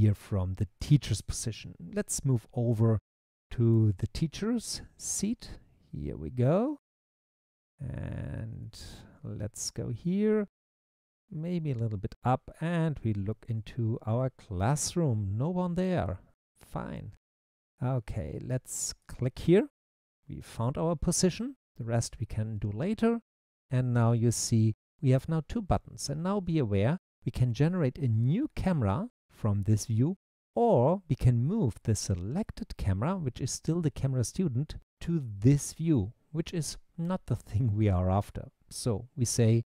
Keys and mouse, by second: 4.1-9.3 typing, 11.2 e, 13.8-16.2 typing, 19.0 click.